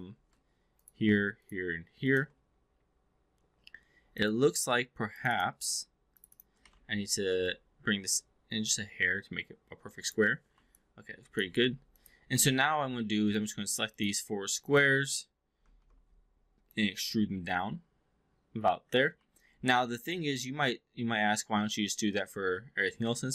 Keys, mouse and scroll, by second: 0.6 shift+click, 2.0 shift+click, 3.5 2, 4.0 click, 5.0 click, 5.3 click, 6.1 shift+click, 6.3 shift+click, 6.6 e, 6.7 r, 7.5-10.3 drag, 10.7-11.4 alt+drag, 11.6 3, 11.9 click, 12.4 alt+middle drag, 13.2 shift+click, 13.8 shift+click, 14.5 shift+click, 15.6 ctrl+e, 16.5-19.0 drag, 19.3-23.3 alt+drag.